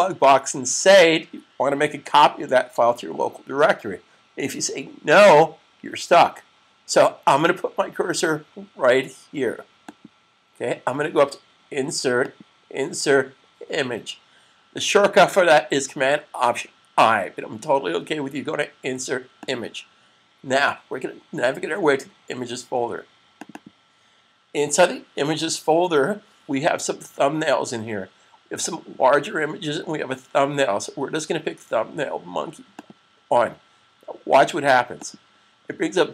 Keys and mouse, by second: 9.8 click, 19.3 click, 23.0 click, 23.4 double click, 32.6 click.